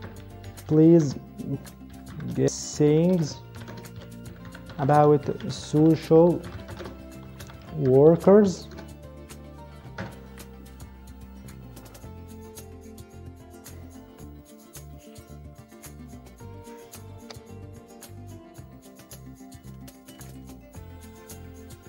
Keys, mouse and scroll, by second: 0.0-8.8 typing, 9.8 Return.